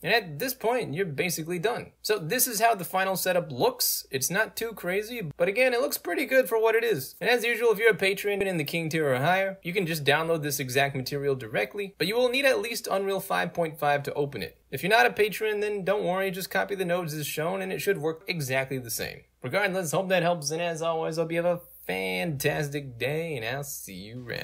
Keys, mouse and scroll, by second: 2.3 right click, 3.3-5.6 right drag, 7.9-11.5 right drag, 13.1 scroll down 2, 13.9-15.3 right drag, 15.4 middle click, 15.4 scroll down 2, 15.7-18.6 right drag, 18.6-24.4 drag.